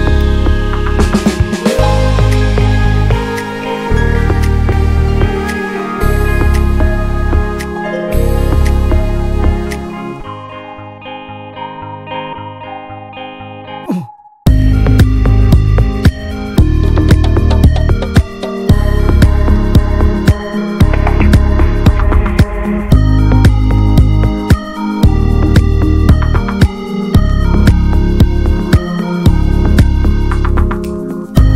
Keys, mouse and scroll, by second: 1.1-1.6 drag, 1.6-2.0 scroll down 2, 2.0 click, 4.3 ctrl+a, 4.7 s, 7.6 scroll down 1, 7.9 drag, 8.1-8.5 drag, 8.5 ctrl+a, 8.8 Tab, 9.0-9.4 scroll up 1, 9.4 3, 9.4 click, 9.8 middle click, 10.2 shift+click, 10.4 middle click, 10.7 scroll up 1, 10.9 middle click, 14.0-14.9 right drag, 14.9 Tab, 15.2-15.7 middle drag, 15.7 click, 15.9 ctrl+a, 17.5-18.1 middle drag, 18.1 Tab, 18.2-19.3 middle drag, 19.3 3, 19.4 click, 20.4 alt+shift+click, 20.7 scroll up 1, 21.0 shift+middle click, 21.4 i, 24.2-25.6 middle drag, 25.6 s, 27.4 middle click, 27.8 e, 28.4 alt+s.